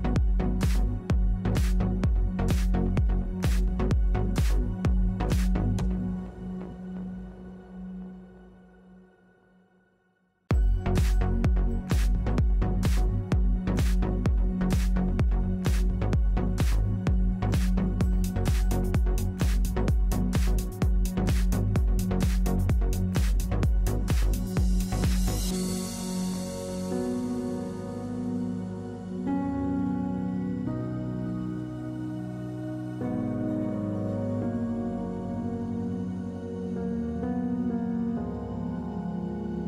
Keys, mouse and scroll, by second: 5.0 f, 6.4-8.6 drag, 17.9-20.1 middle drag, 23.6 middle click, 26.1 middle click, 26.9 2, 27.8 f, 29.0-30.7 middle drag, 33.3 middle click, 35.6-36.7 drag.